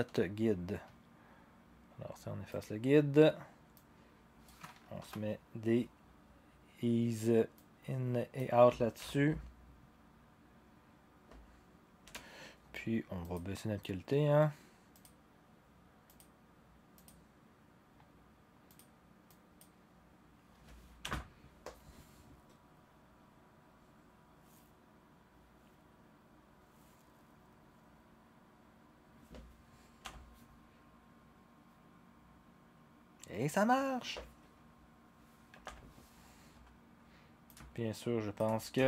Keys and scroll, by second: 5.0 F9, 9.0 0, 12.0 0, 21.0 0, 30.0 0, 35.6 0.